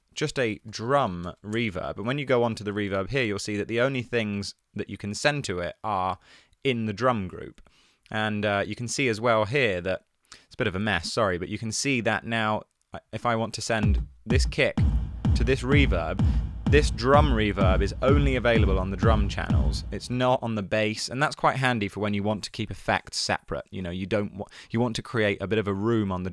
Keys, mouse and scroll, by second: 0.7-1.5 typing, 7.8 Tab.